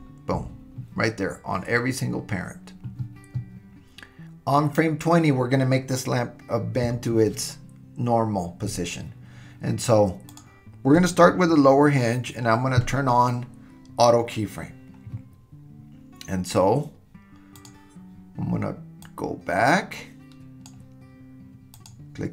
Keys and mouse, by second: 17.7 click, 19.0-20.7 drag, 21.8 click.